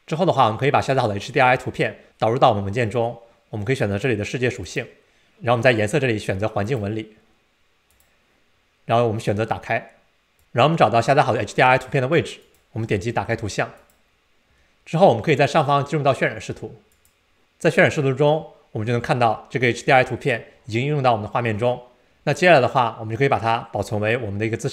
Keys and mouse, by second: 6.8-8.0 drag, 10.4-13.9 drag, 16.9 click, 17.8-22.9 middle drag.